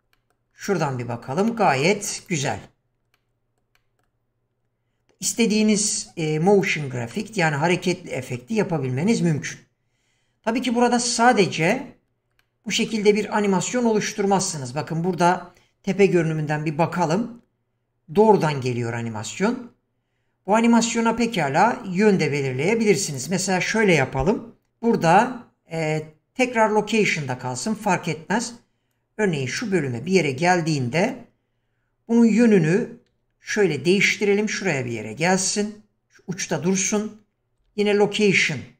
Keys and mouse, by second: 0.1 middle drag, 1.5 middle drag, 2.2 click, 3.2-3.6 middle drag, 3.8 middle click, 5.8 click, 6.6 click, 7.2-7.5 middle drag, 11.6 click, 12.4-12.9 middle drag, 16.2 KP_7, 18.4-21.4 drag, 23.2 click, 28.9-31.1 drag, 33.1 g, 37.6 i.